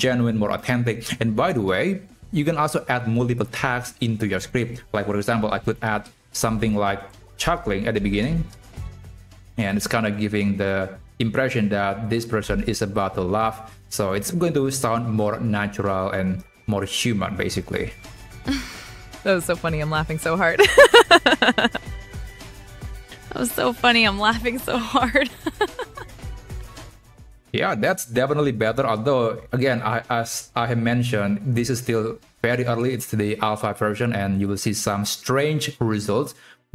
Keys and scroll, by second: 2.5 ctrl+Left, 5.4 Left, 7.5 BackSpace.